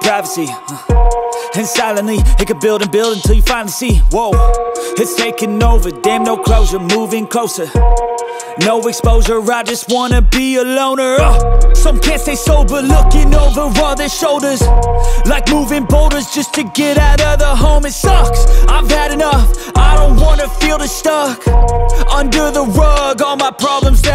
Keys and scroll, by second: 6.5-6.8 typing, 8.0-9.0 typing, 10.7 typing, 13.4 ctrl++.